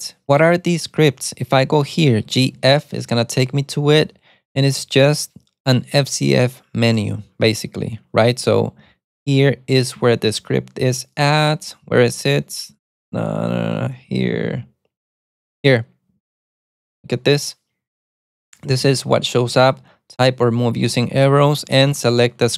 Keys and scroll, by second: 2.2-3.1 typing, 8.2 ctrl+d, 8.3 ctrl+d, 8.9 ctrl+d, 10.3 ctrl+u, 11.5-11.9 typing, 13.0 ctrl+d, 14.0-17.4 typing, 18.7-20.2 typing, 21.6-22.5 typing.